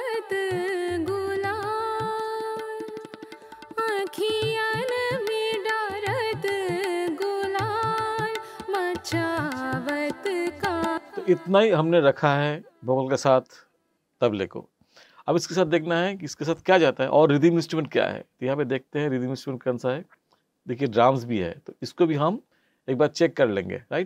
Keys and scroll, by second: 10.9 space.